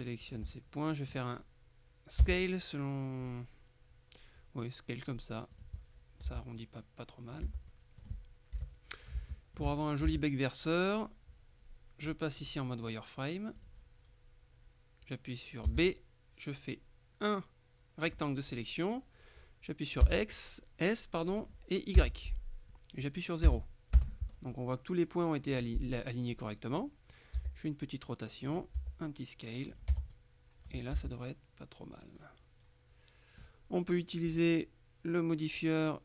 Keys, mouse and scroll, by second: 0.6 shift+click, 2.3 s, 5.6 click, 6.4 Tab, 6.7 click, 7.5 Tab, 7.8 click, 8.7 KP_3, 9.3 shift+middle click, 10.2 shift+a, 12.5 click, 13.7 click, 15.7 b, 16.0-18.7 drag, 20.1 s, 22.1 y, 23.5 KP_0, 24.1 KP_Enter, 24.4-24.9 scroll down 1, 24.9-27.5 scroll up 1, 27.5 r, 28.6 click, 28.8 s, 29.8 click, 30.0 Tab, 30.2 right click, 31.0 z, 31.2 click, 34.3 click.